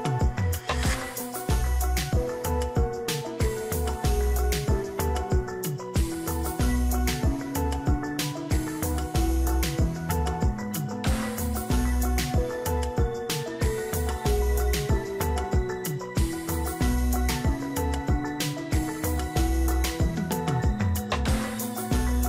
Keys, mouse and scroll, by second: 0.5 shift+click, 1.7 ctrl+g, 2.4 ctrl+t, 3.8 alt+click, 8.0 alt+click, 15.0 right click.